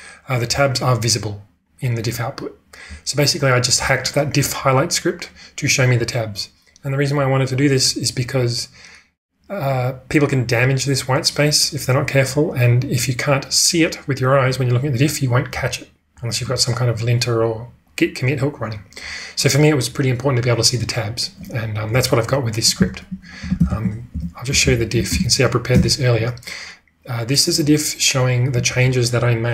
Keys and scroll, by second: 1.2-2.0 typing, 22.8-25.1 typing, 25.8 Return.